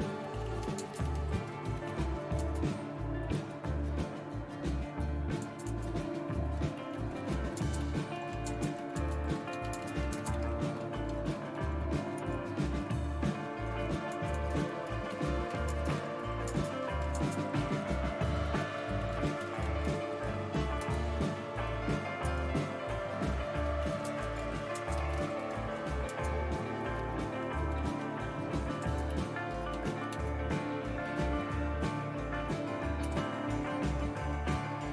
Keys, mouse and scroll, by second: 0.0-22.3 typing, 23.3-30.6 typing.